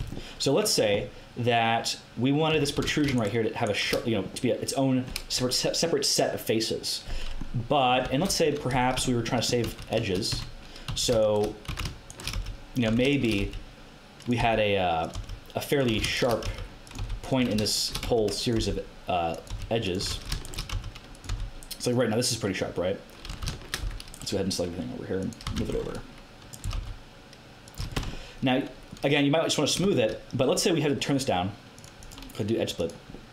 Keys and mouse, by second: 0.0 Tab, 2.5 Tab, 2.7 a, 8.0 Tab, 8.2 KP_1, 9.6 a, 10.3 Tab, 10.8-18.5 typing, 11.2 click, 13.2 right click, 16.1 right click, 19.5 r, 20.0 a, 20.7 r, 21.2 g, 23.3 a, 23.8 c, 25.1 click, 25.4 z, 25.5 c, 26.6 g, 27.7 z, 27.9 Tab, 31.7 middle click, 32.4 click.